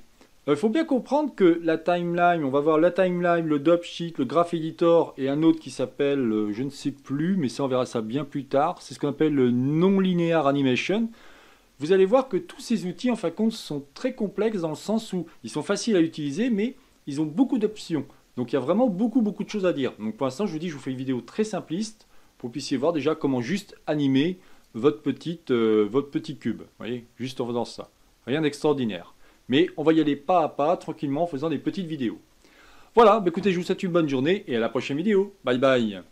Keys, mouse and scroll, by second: 24.9 click, 28.0-36.1 drag.